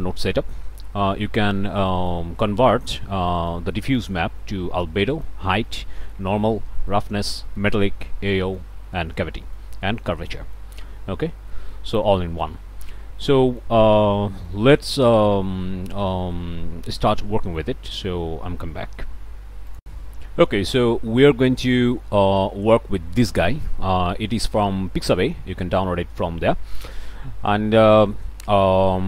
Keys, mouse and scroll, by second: 0.0 click, 0.6 middle click, 1.1 middle click, 1.8 click, 2.9 middle click, 3.3 click, 5.1 click, 5.7 click, 6.6 click, 7.3 click, 7.8 click, 8.3 click, 8.4 middle click, 8.8 click, 9.0 middle click, 9.8 click, 9.9 middle click, 10.8 click, 10.9-11.3 scroll up 1, 11.3 click, 11.5 middle click, 12.2 middle click, 12.8-13.2 scroll up 1, 13.4 middle click, 13.6 scroll up 1, 14.5-15.8 drag, 17.2 click, 17.8-19.8 scroll up 1, 19.8 click, 22.5 middle click, 26.2 middle click.